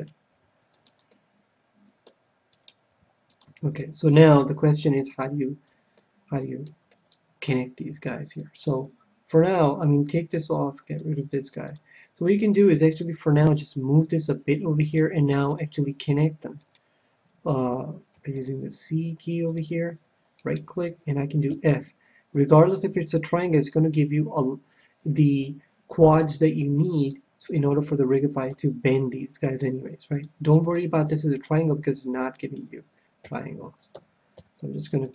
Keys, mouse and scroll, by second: 0.3 g, 1.1-2.9 middle drag, 2.5-4.6 right drag, 2.9 g, 3.4-4.8 drag, 3.8 middle click, 4.8-8.6 middle drag, 8.3-10.3 right drag, 9.5-12.7 drag, 12.8 g, 13.5-16.7 drag, 14.4 g, 15.5-17.3 right drag, 18.2 c, 20.6-22.2 right drag, 21.5 f, 28.5 a, 29.5 c, 32.5-34.4 right drag, 33.2 f, 34.0 a, 34.4 c.